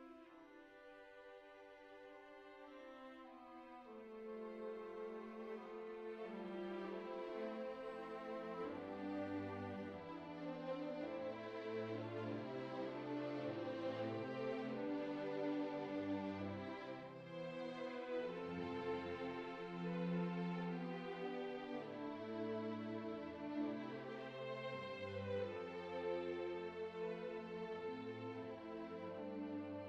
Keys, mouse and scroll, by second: 0.2 g, 1.7 click, 2.9 click, 3.5 shift+click, 6.5 g, 6.8 g, 6.9 right click, 7.0 g, 7.6 middle click, 7.9 shift+middle click, 8.2 alt+z, 8.7 middle click, 9.8 click, 10.9 s, 13.0 middle click, 13.6 a, 14.7 click, 15.5 g, 15.7 g, 15.9 g, 16.8 middle click, 17.8 click, 18.7 middle click, 19.2 middle click, 19.5 shift+middle click, 21.3 click, 22.1 middle click, 22.9 shift+middle click, 24.8 g, 28.1 ctrl+Tab, 28.4 click.